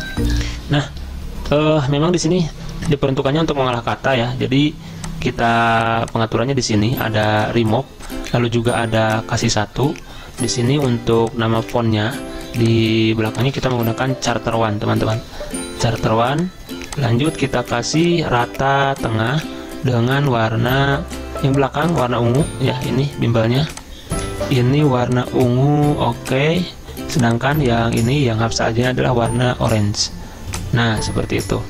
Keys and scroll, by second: 0.0-1.6 typing, 4.0-4.7 typing, 13.3-14.3 typing, 14.4 Return.